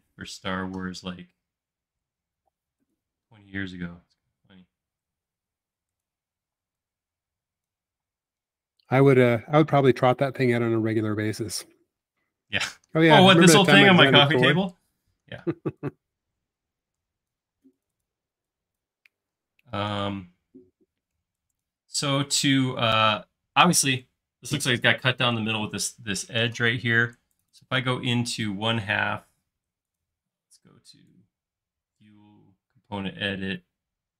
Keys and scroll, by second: 6.5 p, 8.1-8.9 typing, 15.3 e, 16.9 Escape, 17.6 space, 18.2 e, 19.9 super+z, 22.2 alt+space.